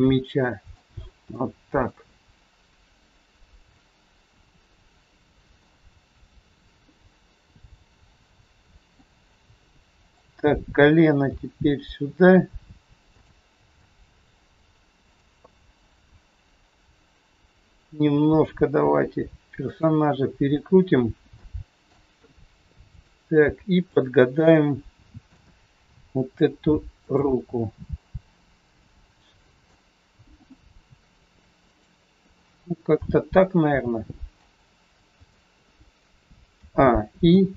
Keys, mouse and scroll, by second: 0.9-1.4 scroll down 3, 1.4 middle click, 3.5 middle click, 6.3 scroll down 2, 6.9 middle click, 9.1 middle click, 9.1 scroll up 3, 10.0 click, 11.3 g, 13.8 middle click, 15.4 scroll up 2, 16.8 scroll up 1, 17.0 click, 18.3 r, 21.4 middle click, 22.8 click, 23.9 shift+click, 24.5 middle click, 24.5 scroll up 1, 25.8 g, 27.3 middle click, 31.6 r, 32.4-32.8 scroll down 3, 32.9 middle click, 35.0 scroll down 1, 35.3 middle click, 36.5 a, 37.1 i.